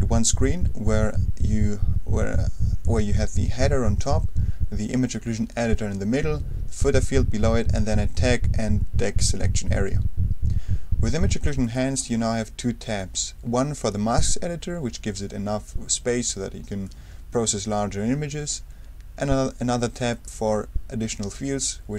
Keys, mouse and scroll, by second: 11.6 click, 16.8-19.0 drag, 20.1 click.